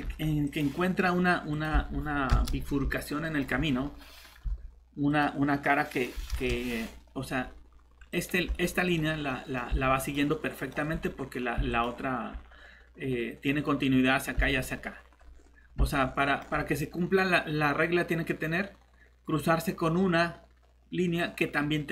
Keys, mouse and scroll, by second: 0.4 click, 2.3 Return, 3.0 middle click, 5.1 click, 6.3 Return, 6.5 middle click, 6.8-8.1 scroll up 1, 8.1 click, 9.1 scroll down 1, 9.3 middle click, 10.0 click, 15.3 scroll up 1, 15.9 middle click.